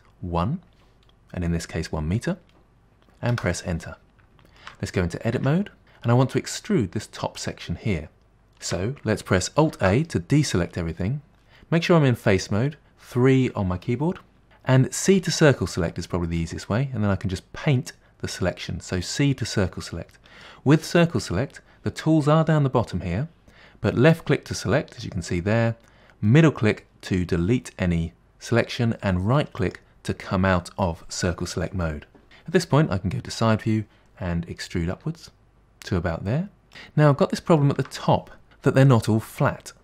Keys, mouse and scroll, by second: 4.2-5.4 shift+middle drag, 5.4 Tab, 8.2-9.8 shift+middle drag, 9.8 alt+a, 15.1 c, 32.9 KP_1, 35.0 e, 36.7 middle click, 37.2-37.7 scroll up 1, 37.7 shift+middle click.